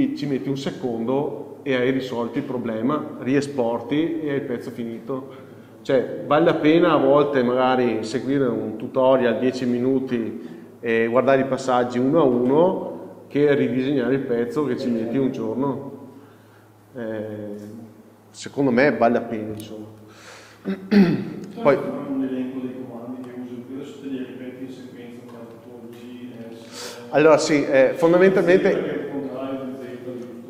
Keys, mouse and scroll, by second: 21.0 scroll down 1, 23.4-30.4 shift+middle drag, 24.7 scroll up 1, 26.5 n.